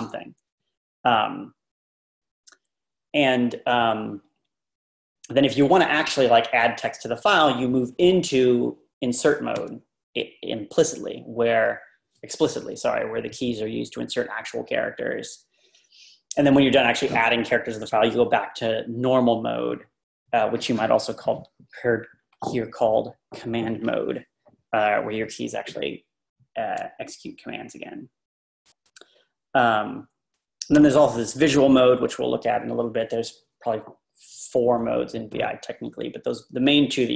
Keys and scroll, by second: 9.6 Tab, 29.0 Tab.